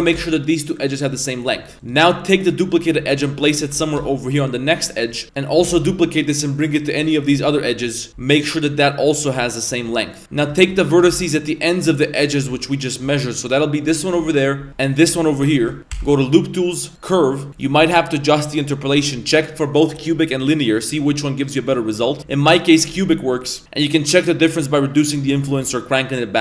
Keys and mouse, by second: 0.0 g, 1.7 2, 1.8 right click, 3.7 1, 4.0 g, 5.2-10.7 shift+middle drag, 11.0 g, 12.6 middle click, 14.0 shift+middle click, 14.9 shift+right click, 15.7 shift+middle click, 15.9 w, 17.6-20.5 drag, 21.1-21.7 drag, 22.2 click, 23.6-26.4 drag.